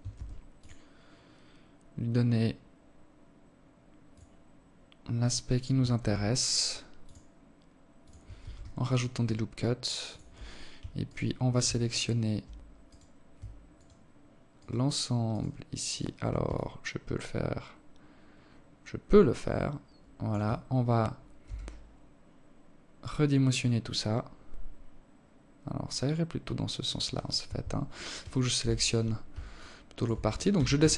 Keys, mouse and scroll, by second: 4.4 ctrl+r, 6.8 ctrl+r, 9.4 alt+right click, 10.3 alt+shift+right click, 11.3 alt+right click, 12.1 alt+shift+right click, 14.9 alt+click, 19.9 s, 27.0 KP_7, 28.0 alt+shift+click, 28.9 a, 29.2 a, 30.4 z.